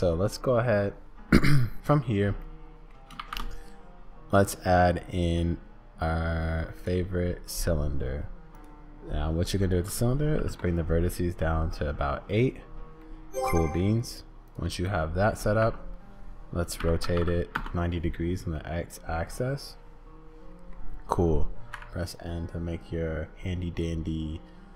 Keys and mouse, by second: 0.4 middle click, 2.4 middle click, 3.2 shift+a, 8.6 click, 9.6-11.0 drag, 13.0 click, 14.9 click, 15.6 r, 18.6-20.8 drag, 21.7 n.